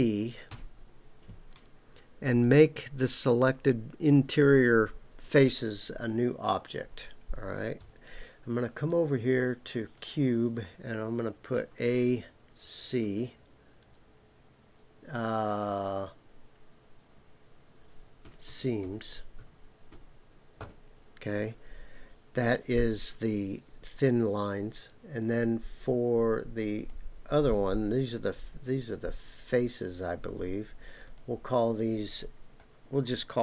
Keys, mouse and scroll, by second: 0.5 p, 7.8 KP_Decimal, 9.9 click, 10.1-21.3 drag, 26.7 click, 30.8 click, 31.0-33.4 drag.